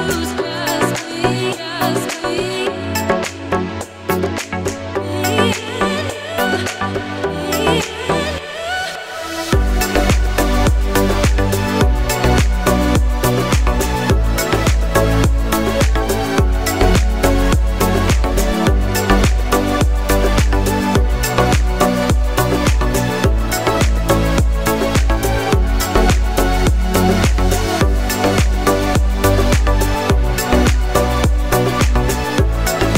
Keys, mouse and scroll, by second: 0.7 z, 1.6 click, 6.8 j, 7.9 click, 13.8 right click, 14.4 click, 15.3 ctrl+t, 16.4 click, 22.4 right click, 23.5 click, 27.3 click, 29.8 alt+click, 31.9 right click, 32.7 click.